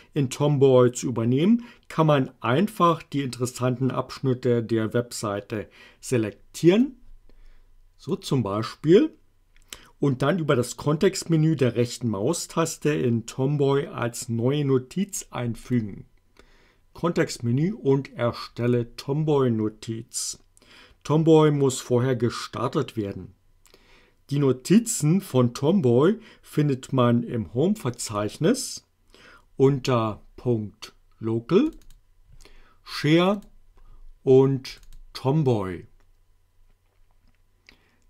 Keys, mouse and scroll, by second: 6.9-8.3 drag, 15.6 right click, 18.7 click, 28.0 click, 31.7 click, 33.2 click, 34.7 click.